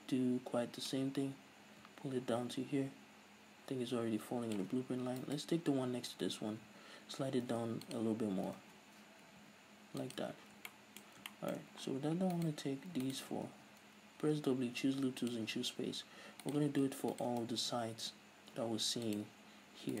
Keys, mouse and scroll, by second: 1.1-5.4 drag, 5.1 right click, 6.8 g, 8.2 click, 8.8 ctrl+z, 9.7 g, 10.3 click, 10.5 z, 10.7 scroll down 2, 10.9-12.5 shift+middle drag, 12.5 right click, 13.3 ctrl+right drag, 13.7 w, 16.7-17.1 right drag, 17.3 ctrl+right click, 17.6 w.